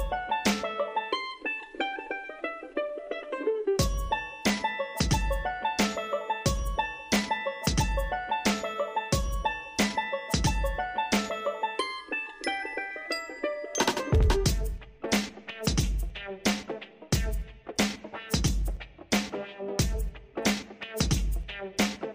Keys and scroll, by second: 9.2 ctrl+t.